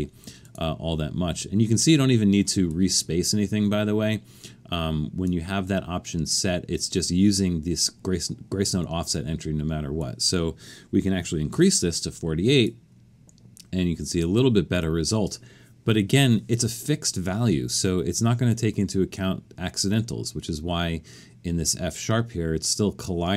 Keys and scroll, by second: 0.0-0.2 typing, 11.2 typing.